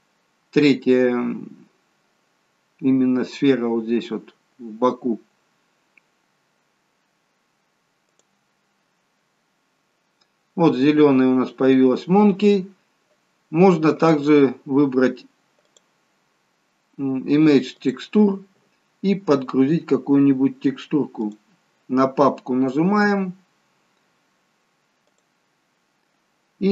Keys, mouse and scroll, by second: 9.7 click, 14.2 click, 15.8 click, 23.7 click, 25.3 click.